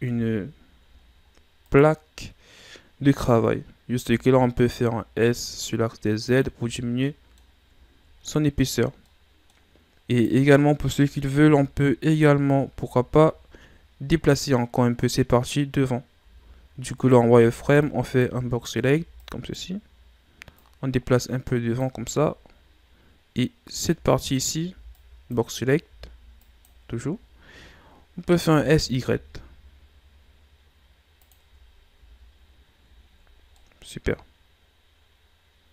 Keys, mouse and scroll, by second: 0.0 KP_1, 0.9 ctrl+scroll down 3, 1.3-1.6 scroll up 2, 1.6 right click, 4.0 s, 6.5 a, 6.8 scroll down 2, 7.0-7.8 middle drag, 7.8-8.2 ctrl+scroll up 5, 8.2-10.1 middle drag, 10.1 right click, 11.0 KP_7, 11.8-12.3 ctrl+scroll up 4, 12.6 Tab, 12.9-13.3 shift+scroll up 5, 16.2 z, 16.9 right click, 17.4 b, 18.9 b, 20.5-21.9 drag, 21.9 z, 23.7 z, 24.1 right click, 24.7 b, 25.8 b, 27.1 z, 28.5 s, 31.4 Tab, 32.0 a, 32.3-33.1 scroll down 7, 33.5-35.7 middle drag.